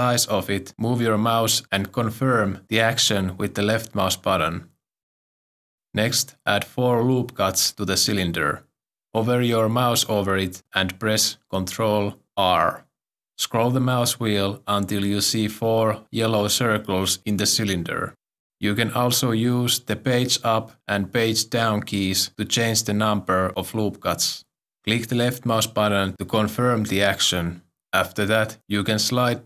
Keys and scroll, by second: 11.8 ctrl+r.